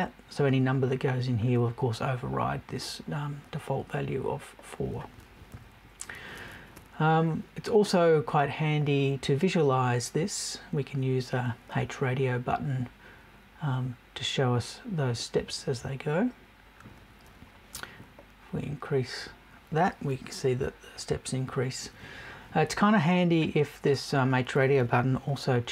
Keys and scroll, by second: 5.5 Right.